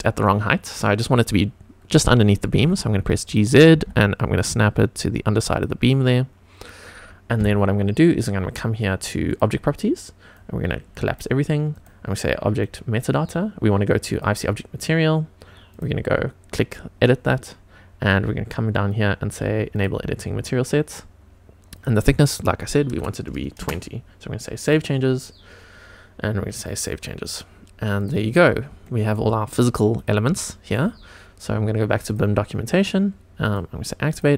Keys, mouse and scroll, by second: 0.0-0.7 scroll up 1, 2.4 g, 2.6 z, 3.2 click, 3.7 g, 3.8 z, 5.5 click, 5.9-6.6 scroll down 2, 6.6-7.0 scroll up 2, 9.3 click, 10.3-11.1 drag, 11.7 click, 12.6-13.2 drag, 14.1 click, 15.7 click, 19.7 click, 21.7-23.6 drag, 24.6 click, 26.7 click, 27.9 click, 28.4-28.8 scroll up 2, 28.8 shift+middle drag, 29.9 click, 30.4 shift+middle click, 32.0 click, 33.4 click, 34.0 click.